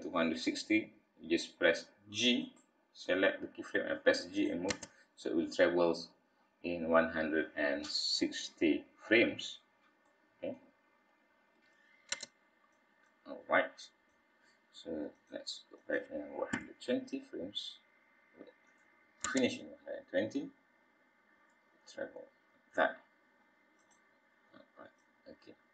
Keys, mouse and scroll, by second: 4.0 click, 4.7 space, 9.4-10.0 scroll up 4, 10.0 middle click, 10.6 scroll up 1, 10.7 scroll down 2, 12.1 space, 12.7 click, 15.8 click, 16.5 g, 19.2 space, 23.8 click, 25.0 click.